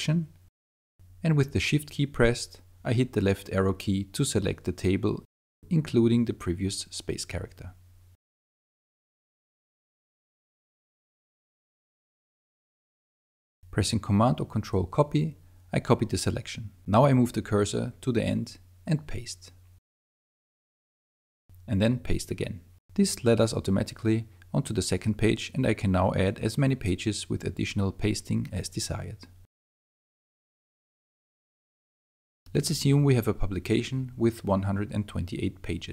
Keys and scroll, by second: 0.0 BackSpace, 6.3 shift+Left, 9.2 shift+Left, 14.2 super+c, 15.9 Right, 19.2 super+v, 22.6 super+v, 24.9 super+0, 29.4 super+v.